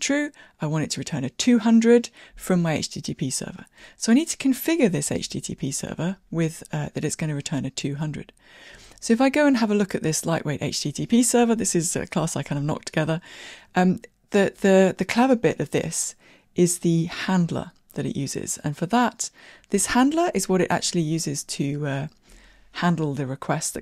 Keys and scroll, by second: 5.3 super+b.